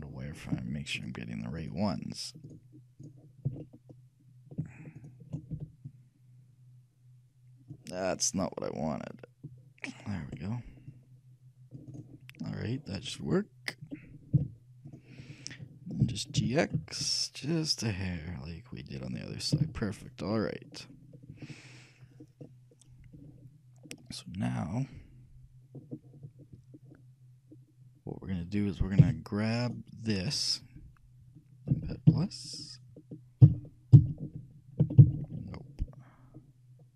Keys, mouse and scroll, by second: 1.1-3.8 right drag, 3.8 middle click, 4.7 shift+click, 5.1 shift+middle click, 5.5-6.9 shift+drag, 5.7 shift+c, 14.5 z, 16.2 g, 20.5-24.5 middle drag, 20.5 a, 29.1 c.